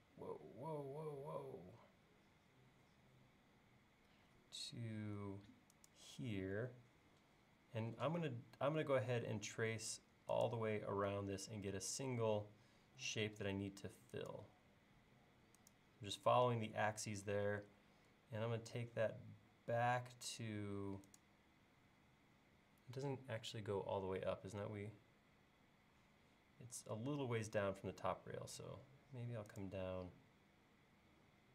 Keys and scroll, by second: 28.6 l.